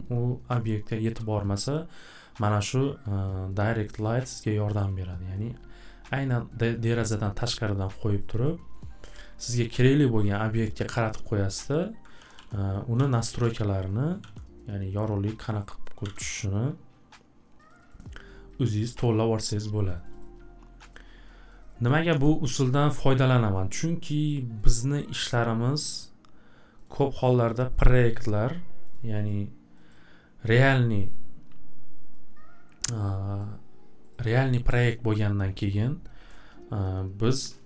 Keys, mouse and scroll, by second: 0.8 click, 4.0 middle click, 7.2 middle click, 8.5 middle click, 12.2 alt+w, 12.2 scroll, 12.4 alt+w, 13.0 c, 13.8 click, 14.2 c, 15.6 click, 16.0 c, 17.7 click, 18.0 click, 18.7 click, 20.0 click, 20.2 click, 20.7 c, 21.7 click, 22.1 c, 24.3 click, 24.7 click, 25.3 click, 26.8 click, 27.2 click, 27.9 click, 28.9 click, 29.3 click, 29.9 click, 33.4 click, 34.1 click.